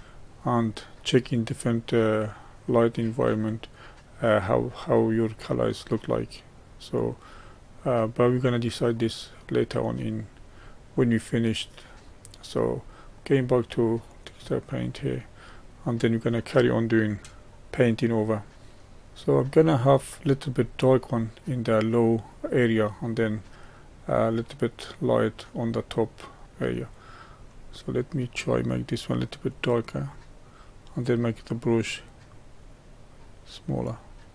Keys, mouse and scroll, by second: 0.1-2.3 middle drag, 2.3-5.9 drag, 9.9 click, 10.9-14.1 middle drag, 14.1 click, 15.0-19.7 middle drag, 19.7-20.5 scroll up 4, 20.5-29.5 middle drag, 29.5-34.3 drag.